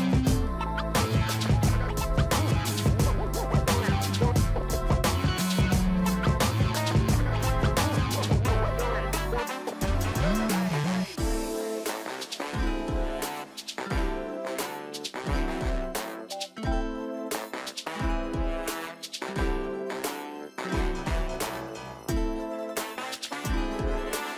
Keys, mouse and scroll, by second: 0.1 ctrl+click, 1.0 ctrl+j, 1.2-1.9 scroll down 1, 1.9 ctrl+click, 4.8 scroll down 1, 5.5-7.5 scroll up 25, 7.8 shift+click, 8.9 ctrl+g, 10.1 ctrl+t, 11.0 alt+click, 20.3 ctrl+click.